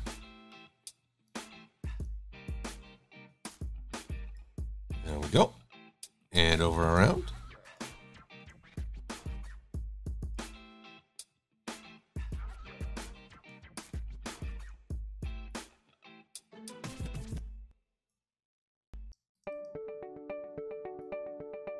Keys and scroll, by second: 8.4 Delete.